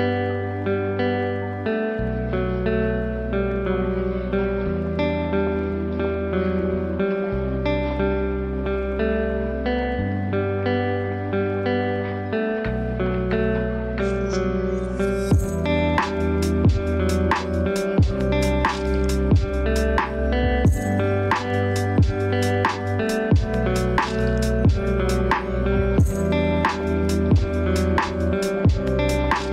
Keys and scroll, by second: 9.5 ctrl+space.